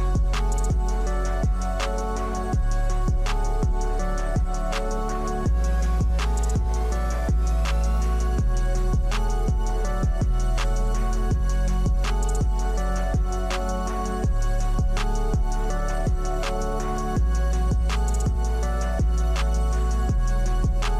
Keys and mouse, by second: 1.3-3.9 drag, 4.5 Tab, 5.8 click, 7.7-11.2 middle drag, 11.3 Tab, 13.8 click, 14.3 click, 16.0-18.5 drag, 19.4 Tab, 19.9 click, 20.4 Tab.